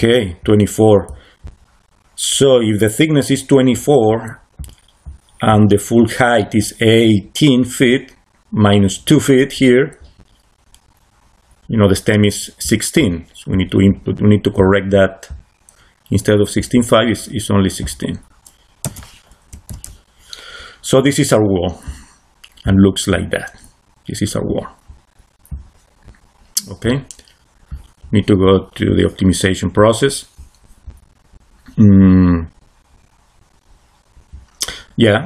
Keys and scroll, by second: 18.7 1, 19.4 6, 19.6 Return.